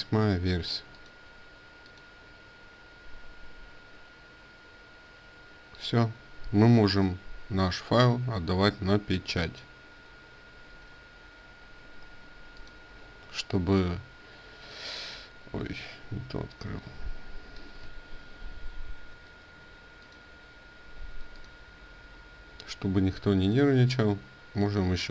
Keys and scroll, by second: 10.4 ctrl+w, 17.8 Escape.